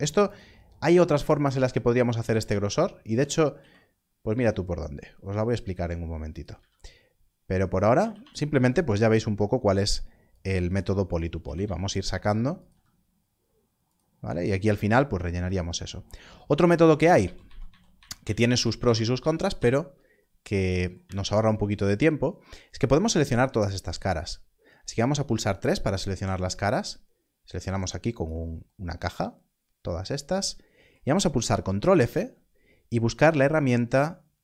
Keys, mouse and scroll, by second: 0.2 click, 0.7 scroll up 1, 2.2 z, 2.9 shift+click, 6.3 click, 7.7 click, 10.2 z, 10.4 s, 11.0 click, 12.5 click, 13.8 click, 16.7 ctrl+z, 17.1 ctrl+z, 18.1 ctrl+z, 18.4 ctrl+z, 18.7 ctrl+z, 19.5 ctrl+z, 21.1 ctrl+z, 26.8-29.0 scroll down 1, 31.8 ctrl+f.